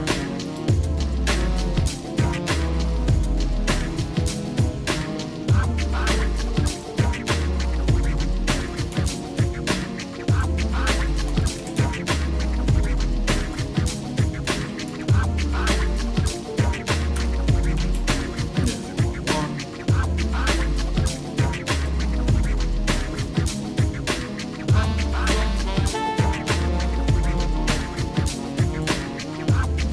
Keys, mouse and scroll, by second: 1.4 shift+middle click, 2.5 middle click, 4.7 middle click, 6.7-9.2 drag, 10.4-12.0 drag, 13.5-18.0 drag, 19.1 shift+middle click, 21.1 shift+middle click, 21.8 shift+click, 23.2 shift+click, 24.9 ctrl+l, 29.4 shift+middle click.